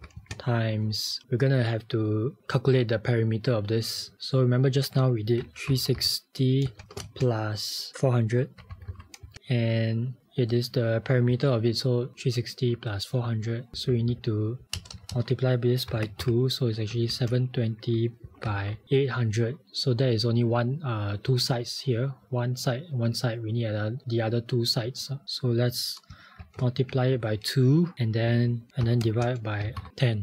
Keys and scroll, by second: 1.2 shift+9, 5.2-6.5 typing, 8.4-9.4 typing, 10.2 Right, 13.7 Left, 13.9 Left, 14.1 Left, 14.7 Left, 14.8 BackSpace, 15.0 BackSpace, 15.2 BackSpace, 26.4-26.9 typing, 28.9-30.2 typing.